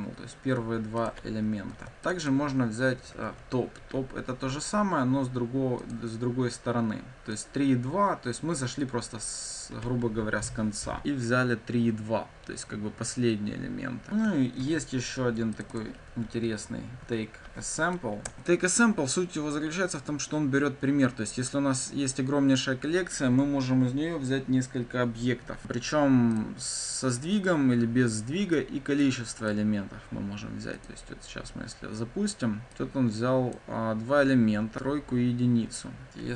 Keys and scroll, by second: 1.7 ctrl+d, 3.7 Escape, 5.8 ctrl+F5, 14.5 ctrl+d, 18.2 Return, 30.8 ctrl+F5.